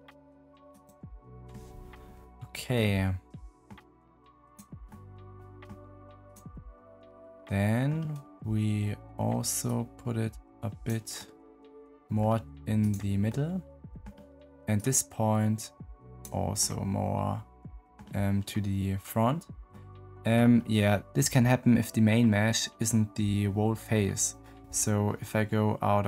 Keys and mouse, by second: 2.7 middle click, 4.8 middle click, 6.6 middle click, 9.6 middle click, 10.8 middle click, 11.1 middle click, 13.2 middle click, 14.7-16.1 middle drag, 17.9-19.7 middle drag, 25.9 Tab.